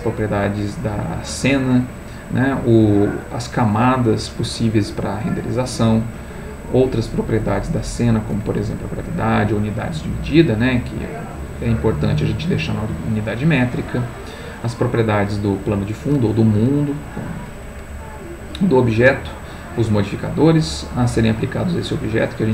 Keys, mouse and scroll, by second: 2.0 click, 5.5 click, 9.7 click, 13.2 click, 13.9 click, 17.9 click, 19.1 click, 21.4 click.